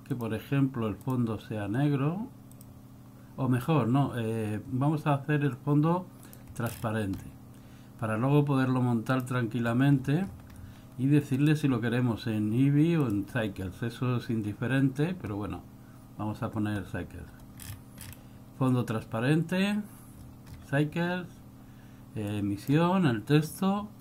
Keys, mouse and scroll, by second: 0.2 click, 1.1 click, 2.6 click, 6.4 click, 6.8-9.3 scroll down 10, 9.3 click, 10.1-11.4 scroll up 15, 11.4 click, 17.7-18.2 scroll down 11, 20.4-20.7 scroll up 11, 22.4 click.